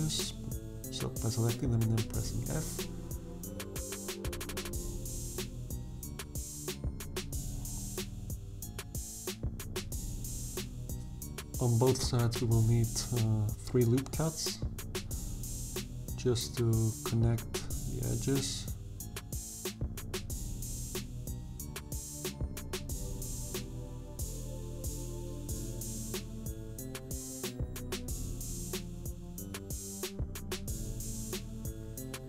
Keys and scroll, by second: 6.1 f, 7.8 f, 13.6 ctrl+r, 21.8 f, 23.8 f, 29.9 f.